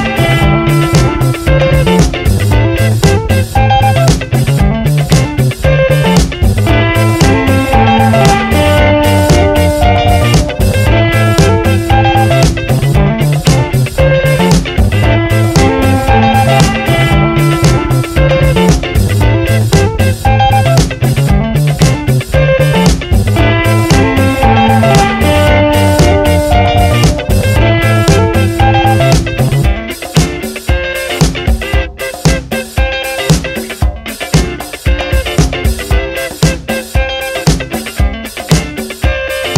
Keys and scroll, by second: 0.1 Return, 1.1 Down, 1.8 Up, 5.9 Left, 7.6 Right, 9.3 ctrl+t, 14.1 Return, 15.4 Left, 16.0 Right, 29.3 F9, 32.1 ctrl+n, 35.5 ctrl+shift+n, 36.7-39.5 typing.